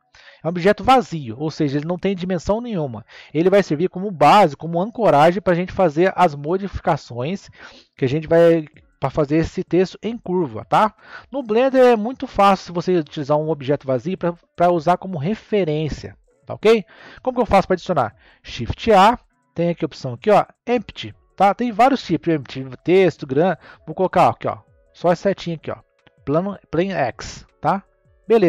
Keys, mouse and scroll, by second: 18.4 shift+a.